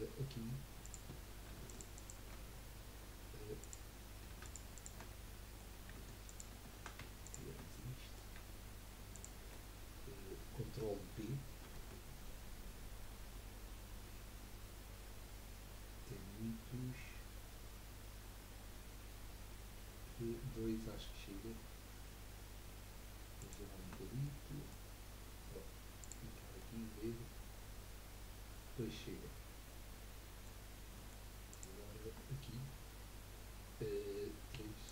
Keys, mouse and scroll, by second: 0.2 scroll up 1, 0.9 click, 1.7 alt+shift+click, 1.9 alt+shift+click, 3.6 click, 4.4 alt+shift+click, 4.7 alt+shift+click, 5.2-6.2 middle drag, 6.2 alt+shift+click, 7.2 shift+click, 7.7-9.1 middle drag, 9.1 shift+click, 10.1 scroll up 1, 11.6 ctrl+b, 14.4-21.6 drag, 14.4-21.6 right drag, 18.6-21.6 middle drag, 24.0 Tab, 24.4-26.1 middle drag, 26.1 click, 26.6-29.7 middle drag, 30.7 scroll down 1, 30.8 scroll up 1, 30.9-31.5 middle drag, 31.5 click, 32.1 Tab, 34.6 3, 34.8 click.